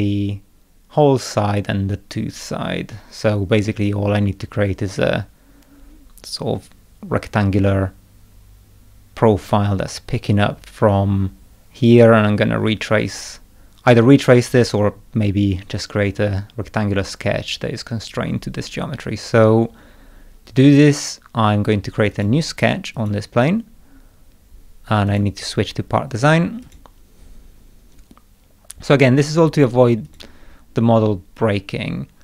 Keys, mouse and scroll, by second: 22.1 click, 23.0 click, 25.1 click, 26.7 click, 30.1 click.